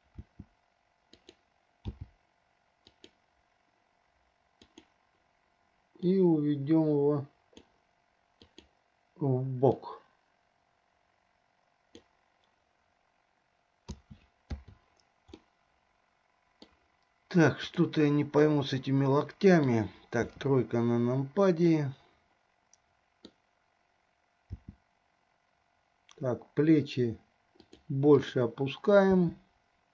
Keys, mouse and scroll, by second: 0.4 r, 2.1 g, 4.7 click, 6.3-8.0 drag, 8.7 click, 10.0 click, 10.2-12.3 drag, 14.1 a, 14.8 i, 15.6-17.0 middle drag, 17.9 click, 18.6-20.0 middle drag, 20.6 KP_3, 22.0-23.6 middle drag, 24.8 r, 28.5 click, 29.3 r.